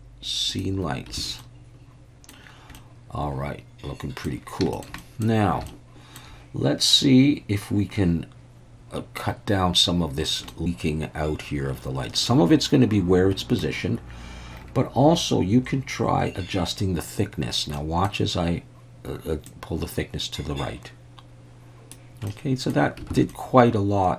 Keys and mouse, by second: 1.2 alt+a, 1.4-2.3 middle drag, 2.8-4.3 middle drag, 4.7 shift+middle click, 5.0 middle drag, 5.7-6.2 shift+middle drag, 10.5-13.6 middle drag, 17.8 middle click, 19.5-22.0 drag, 22.3-22.7 middle drag, 23.2 alt+a, 23.3-24.1 middle drag.